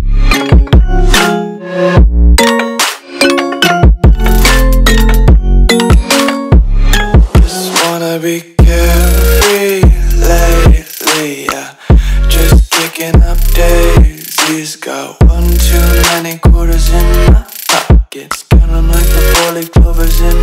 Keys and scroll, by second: 0.1 alt+super+space, 0.2 alt+super+space, 0.5-2.8 typing, 4.9 typing, 7.4 r, 10.9 a.